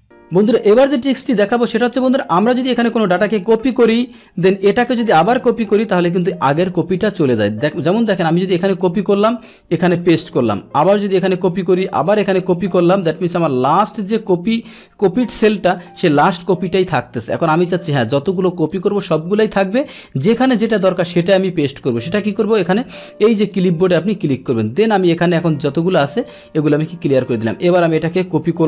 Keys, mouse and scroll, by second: 0.1 click, 2.3 click, 3.3 ctrl+c, 4.7 click, 5.4 ctrl+c, 6.7 click, 7.4 click, 8.2 ctrl+c, 9.2 click, 10.2 ctrl+v, 10.2 click, 10.4 ctrl+v, 10.8 click, 11.3 ctrl+c, 11.7 click, 12.6 ctrl+c, 13.8 click, 14.3 ctrl+v, 15.4 click, 15.5 click, 17.5 click, 17.9 click, 18.2 click, 18.6 click, 19.0 click, 23.5 click, 26.1 click, 27.5 click, 28.4 ctrl+c.